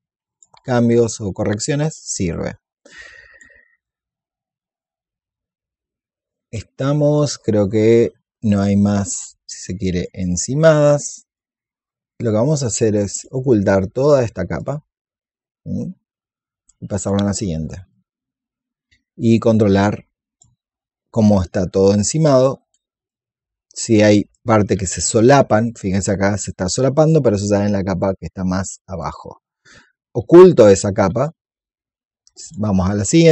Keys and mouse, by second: 1.0 alt+click, 1.9-8.3 drag, 9.1-10.7 drag, 13.0 click, 16.9 click, 17.9-21.3 drag, 22.1 alt+click, 22.9-26.3 drag, 26.4 click, 28.9 click, 32.3 click, 33.0 alt+click.